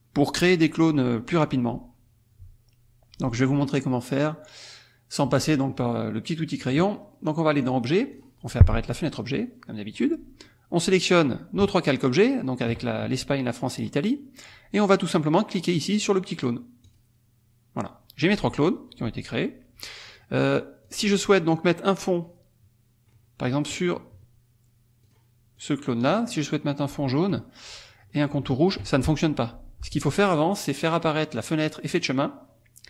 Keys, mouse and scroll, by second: 7.6 click, 8.1 click, 9.4 click, 11.1 click, 11.9 shift+click, 12.3 shift+click, 14.1 click, 16.9 click, 20.1 click, 20.9 click, 22.0 click, 23.5 click, 25.0 click, 25.6 click, 27.3 click, 28.5 shift+click, 30.8 click, 31.9 click.